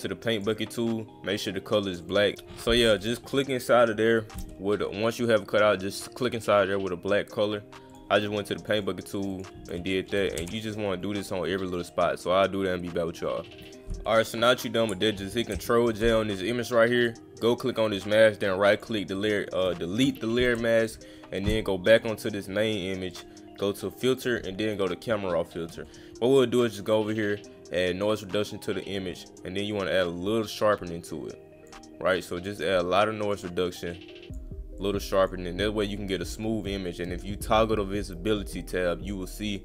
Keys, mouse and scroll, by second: 0.4 click, 2.0 click, 7.9 click, 8.6 click, 9.2 click, 9.3 click, 14.4 click, 17.0 click, 17.4 right click, 18.8 click, 20.8 click, 21.9 click, 23.1 click, 24.1 click, 25.8 click, 27.1-29.0 drag, 29.7-31.7 drag, 32.1-32.5 drag, 32.6 click, 33.9 click, 34.8-35.2 drag, 39.4 click.